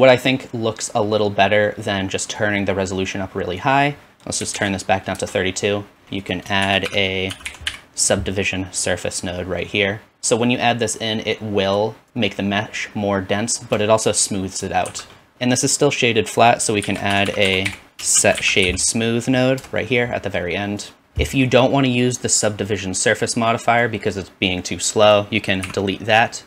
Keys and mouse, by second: 6.5 shift+click, 6.6 shift+a, 10.1 alt+z, 11.1 click, 14.9 shift+z, 15.3-20.8 drag, 16.8 shift+a, 17.3 s, 21.0-23.8 drag, 25.6 x.